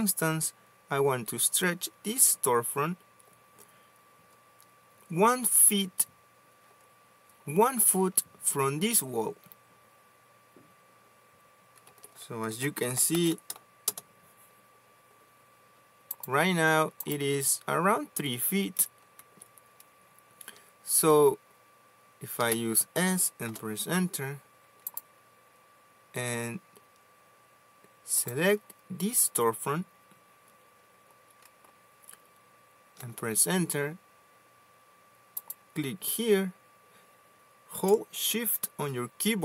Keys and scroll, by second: 12.1 Escape, 12.6-14.1 typing, 19.5 Escape, 22.6 s, 23.7 Return, 33.3 space.